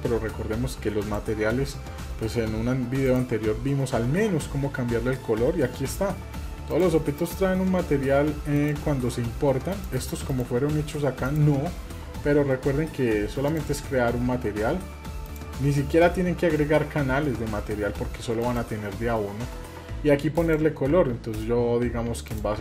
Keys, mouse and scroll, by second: 1.0 click, 3.1 click, 6.7 drag, 7.2 click, 8.6 click, 9.7 click, 10.3 click, 11.2 click, 13.5 click, 15.3 click, 18.4 click, 20.4-20.9 drag, 22.3 click.